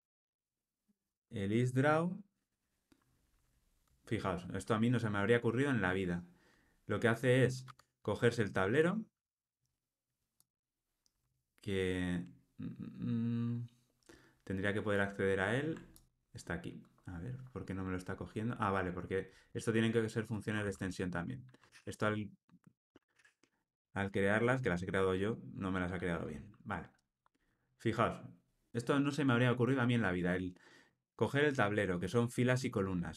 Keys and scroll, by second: 7.6 Tab, 14.9 super+b, 16.8 alt+super+[, 20.5 super+c, 21.6 super+v.